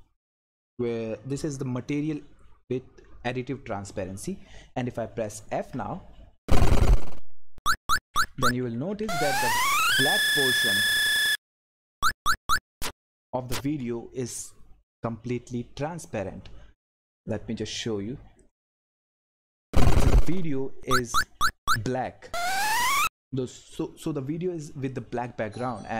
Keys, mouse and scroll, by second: 5.6 f, 7.6-9.5 typing, 17.2 click, 17.3 click, 22.8 click.